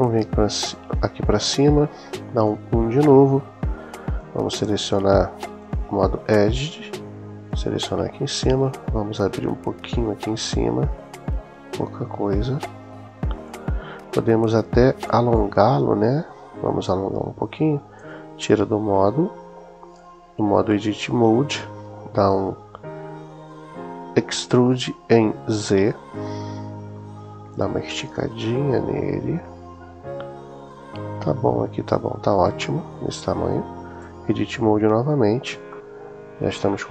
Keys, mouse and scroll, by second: 2.3 KP_1, 4.0 click, 5.4 click, 6.4-7.6 drag, 9.6 s, 13.1 click, 14.6 shift+middle click, 17.8 Tab, 25.4 s, 25.9 z, 32.2 click, 33.8 Tab, 35.9 middle click, 36.6 middle click.